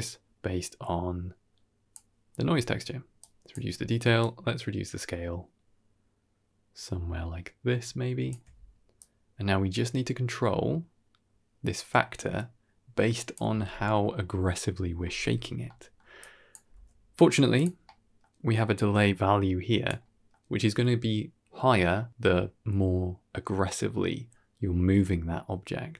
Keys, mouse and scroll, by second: 3.1 click, 4.1-8.2 shift+drag, 8.9-13.2 drag, 15.3-15.8 scroll down 2, 15.5 middle click, 16.1 click, 16.6 g, 17.7 middle click, 19.1 click.